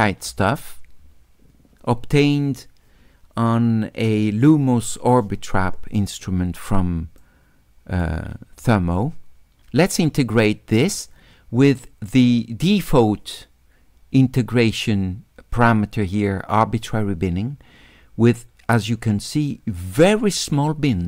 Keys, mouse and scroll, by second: 7.2 right click, 20.1 click.